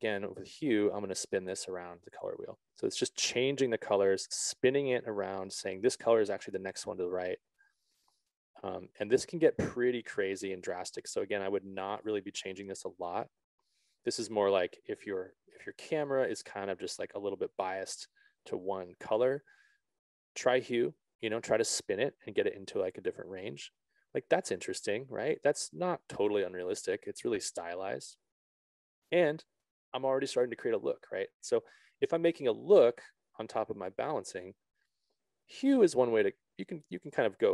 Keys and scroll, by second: 10.8 ctrl+z, 13.5 5, 13.7 Return.